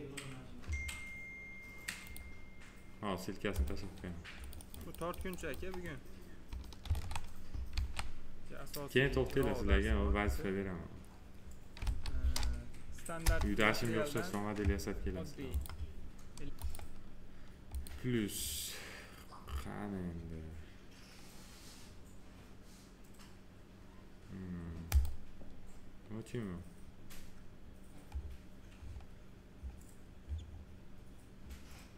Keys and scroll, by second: 6.7 ctrl+a, 11.7 ctrl+v, 13.1 Return.